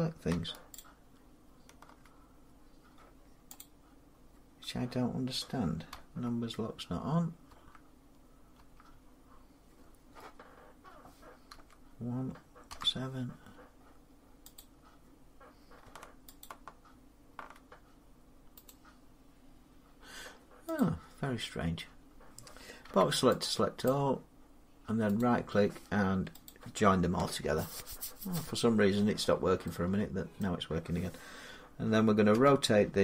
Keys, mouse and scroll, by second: 0.6 shift+click, 3.4 click, 5.8 Num_Lock, 11.4 End, 12.5 Home, 14.4 click, 16.3 shift+click, 18.5 right click, 20.6 click, 22.7 b, 23.7 click, 25.0 right click, 26.3 click, 30.2 middle click, 32.2 r.